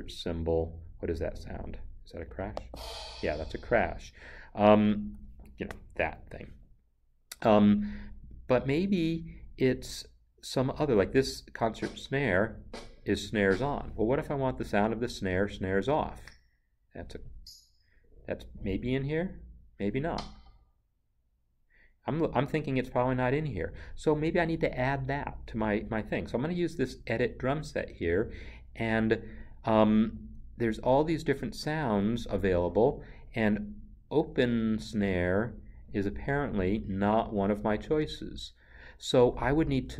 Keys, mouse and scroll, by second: 2.5 click, 11.6 click, 17.7 click, 20.0 click, 27.5 click, 30.2 click.